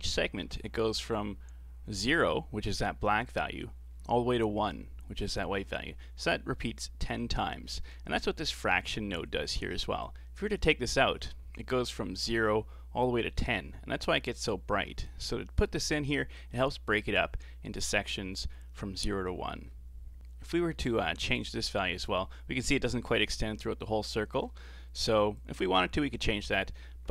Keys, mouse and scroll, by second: 7.7-8.5 scroll down 4, 8.6-9.0 scroll up 5, 9.0-10.0 middle drag, 10.0-13.1 alt+drag, 15.1 Left, 15.1-18.1 drag, 19.7-20.2 scroll down 4, 20.2 middle click, 20.4-20.7 scroll up 5, 20.7-21.1 middle drag, 21.1-22.0 scroll up 4, 22.0-25.0 drag, 25.4-27.1 drag.